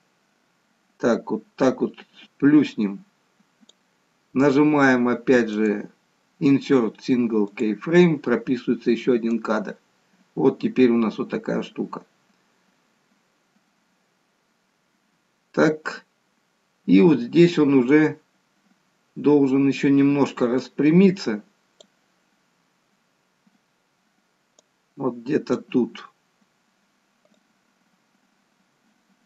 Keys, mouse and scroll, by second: 5.5 right click, 9.3 click, 24.6 click, 27.4 click.